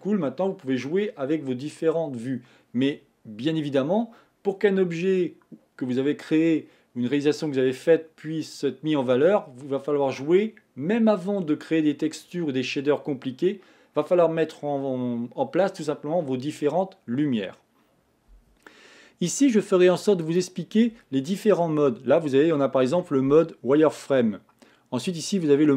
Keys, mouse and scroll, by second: 20.5 click, 21.6-24.6 middle drag.